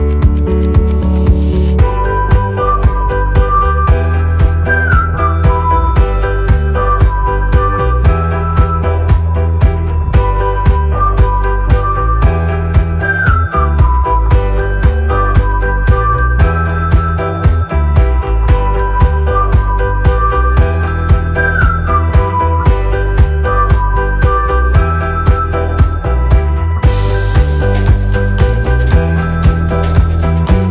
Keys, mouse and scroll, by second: 0.5 click, 3.6 alt+Num_Lock, 3.8-4.2 alt+scroll up 2, 4.2 space, 4.3 click, 4.6 space, 6.4 click, 9.4 ctrl+alt+KP_2, 10.2 click, 13.7 shift+click, 18.8 shift+click, 19.4 click, 23.0 shift+click, 24.1 click, 30.2 click.